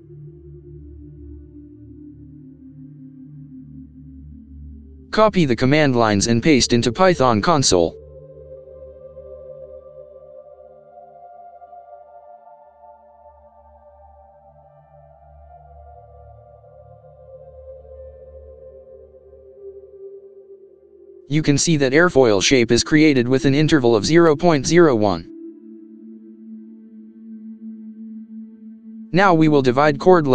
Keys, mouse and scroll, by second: 2.7 typing, 12.4 ctrl+v, 13.2 Return, 15.4 Return, 30.0 ctrl+c.